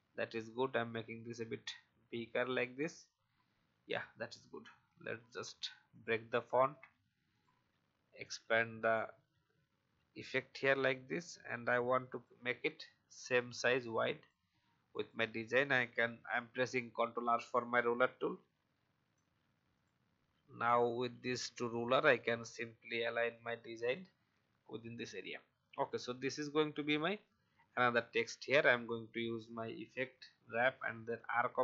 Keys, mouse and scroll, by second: 3.9 alt+scroll down 1, 4.8 right click, 5.9 click, 8.9 alt+scroll up 1, 10.2-12.2 shift+drag, 13.2 shift+click, 14.9 click, 16.1 ctrl+r, 17.2-19.1 drag, 19.7 click, 23.8 click, 24.7 alt+scroll down 1, 25.9-27.7 drag.